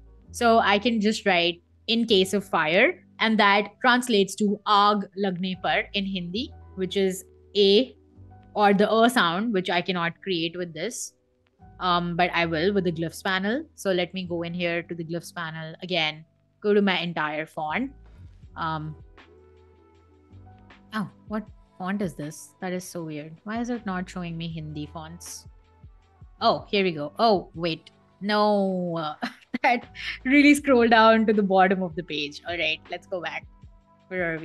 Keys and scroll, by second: 1.5 super+a, 7.1 a, 8.4-10.9 typing, 12.6 g, 13.8 Escape, 21.2 Escape, 25.2 Escape.